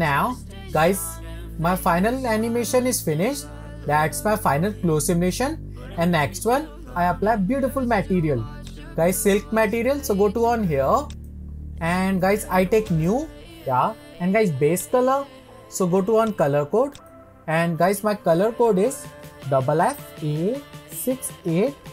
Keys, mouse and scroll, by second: 3.1-3.5 middle drag, 3.8-5.9 middle drag, 8.8 click, 11.2 click, 13.0 click, 14.9 click, 20.1 f.